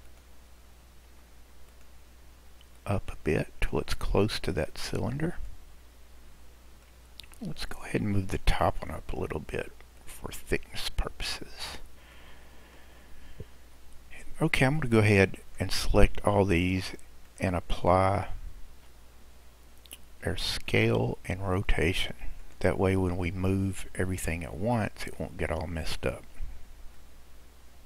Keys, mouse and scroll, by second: 0.0 click, 1.1 Tab, 1.7 click, 2.9 click, 5.9-6.9 scroll down 2, 6.9-8.5 middle drag, 8.5 click, 10.0 click, 11.7-12.2 scroll down 1, 12.2-13.7 middle drag, 13.7 Tab, 14.8 drag, 17.3-20.4 drag, 22.4 click, 23.0-24.4 scroll down 1, 24.4-24.8 scroll down 1, 24.8 click, 25.6 drag, 27.1 click.